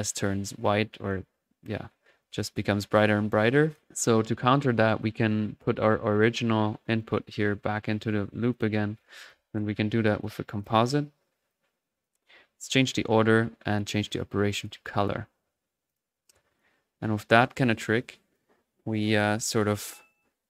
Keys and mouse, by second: 0.6 middle click, 0.9 click, 1.4 typing, 1.6 middle click, 2.2-2.6 drag, 2.5 1, 2.7-3.5 middle drag, 3.5 click, 4.3-4.9 right drag, 4.7 click, 5.6-6.8 middle drag, 6.9 click, 8.0 right click, 8.5 click, 8.9 typing, 9.9-10.7 typing, 10.2 click, 10.6 click, 11.5 click, 13.1 click, 13.4-15.3 drag, 15.8 click, 16.8-18.0 middle drag, 18.3 click.